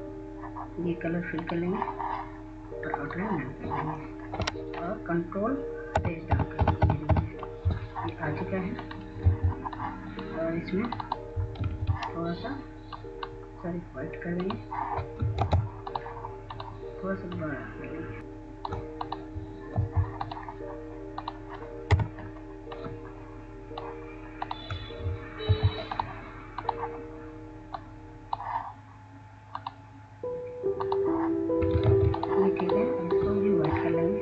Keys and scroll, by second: 7.9 ctrl+Page_Down, 8.3 ctrl+Page_Down, 11.3 F2, 13.6 ctrl+a, 17.3 ctrl+space, 17.7-18.4 typing, 21.8 c, 27.5 b, 33.9 ctrl+z.